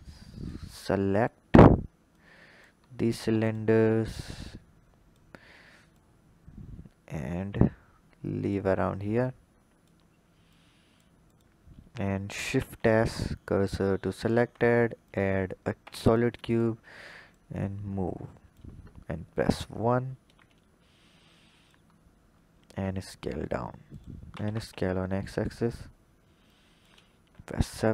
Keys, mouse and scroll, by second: 0.5-1.8 scroll down 9, 2.0 click, 2.8-3.3 scroll up 2, 3.3 shift+click, 4.2 click, 5.8 click, 9.1 click, 10.4 click, 11.8-12.4 scroll down 1, 12.4 shift+s, 14.0 shift+a, 15.7 s, 17.1 click, 19.1 KP_1, 19.8-21.1 scroll up 4, 21.1 click, 21.8-22.6 scroll up 4, 22.6 s, 24.1 s, 26.3-27.2 drag, 27.2 KP_7.